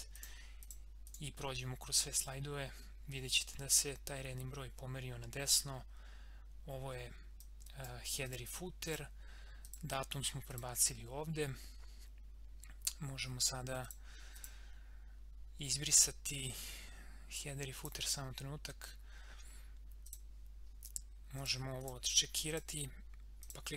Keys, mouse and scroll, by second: 1.6 scroll down 1, 2.1 click, 5.4 click, 13.8 click, 17.7 click, 20.1 click.